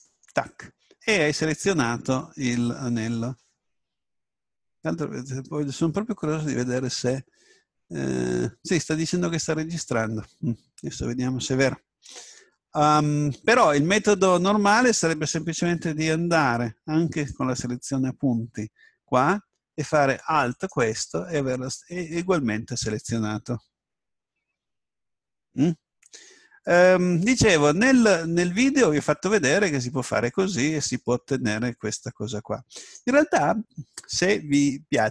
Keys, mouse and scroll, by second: 14.5 a, 17.1-19.1 drag, 20.5 right click, 29.4 s, 32.9 right click.